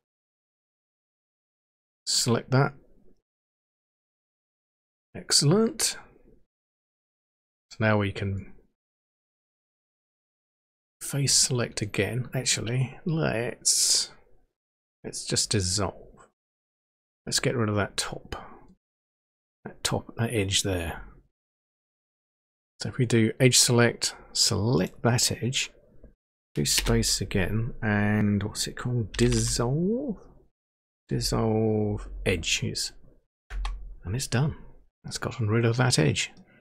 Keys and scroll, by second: 26.7 space, 29.0-29.9 typing, 31.1 Down, 31.8 Down, 32.0 Down, 33.5 Return.